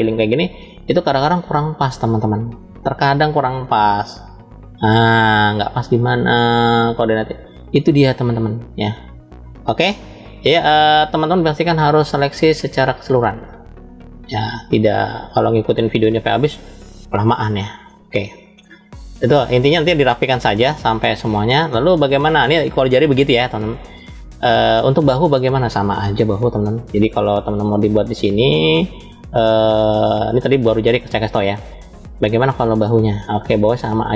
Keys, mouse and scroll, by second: 1.1 click, 2.4-3.5 middle drag, 4.0 click, 5.2-6.4 drag, 7.1 middle click, 8.4 click, 11.0 middle click, 12.4 click, 14.2-15.3 drag, 15.9-16.9 scroll down 2, 17.3 scroll down 2, 17.6 middle click, 20.4-21.6 shift+middle drag, 21.9 click, 23.2-23.7 scroll down 3, 24.3 scroll down 2, 24.5 shift+middle click, 25.9 KP_1, 26.9 shift+middle click, 27.9 scroll up 2, 28.9-29.9 scroll up 1, 31.1-32.1 drag, 33.7-34.1 drag.